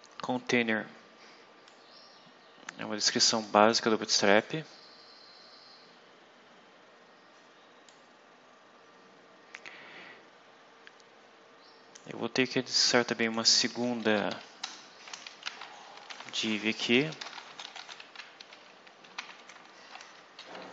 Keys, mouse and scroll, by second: 1.6-3.5 drag, 4.2 click, 7.8-12.1 drag, 13.1 click, 14.0 Up, 14.2 End, 14.5 Return, 15.1-19.8 typing, 20.1 Right.